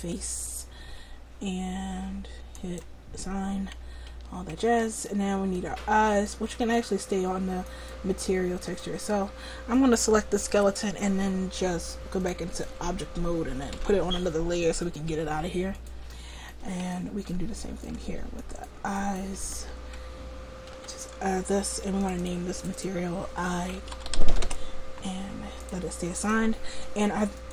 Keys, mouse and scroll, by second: 4.2 Tab, 7.7-11.0 right drag, 12.3-13.8 drag, 13.8 m, 18.5-19.5 drag, 19.5 Tab, 20.7 l, 22.1-27.5 drag, 24.2 l.